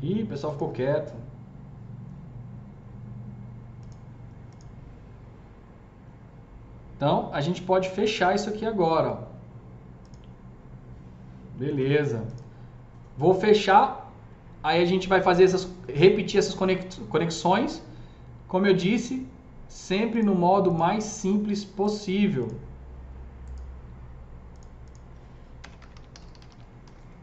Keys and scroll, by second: 11.6 alt+q, 25.4-27.2 typing.